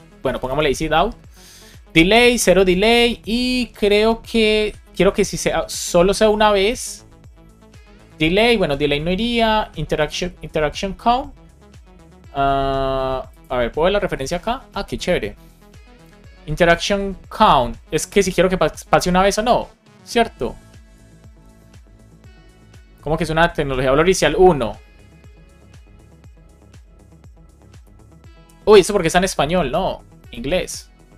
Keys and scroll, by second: 0.1 Down, 0.6 Return, 1.2 Right, 1.8 super+Right.